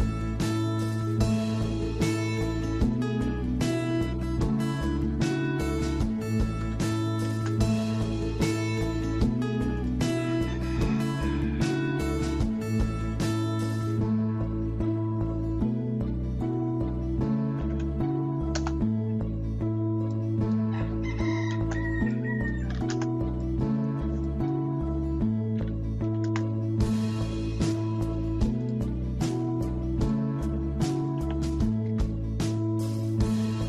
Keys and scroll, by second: 6.6 typing, 12.5-13.2 typing, 17.4-18.3 typing, 18.5 Return, 22.5-23.2 typing, 25.7-26.5 typing, 27.8-28.5 typing, 31.2-32.4 typing.